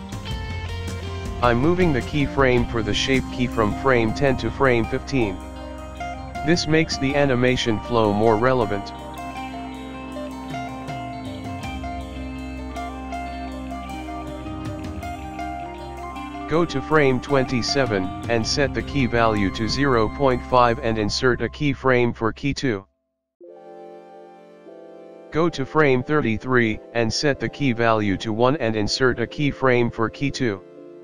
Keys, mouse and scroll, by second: 0.1 ctrl+z, 0.1 click, 0.4 click, 1.8 click, 4.1 click, 5.0 click, 5.2 click, 5.8 click, 6.1 click, 7.4 space, 8.9 space, 9.4 click, 16.8 click, 19.5 click, 24.5 click, 24.6 i, 25.9 click.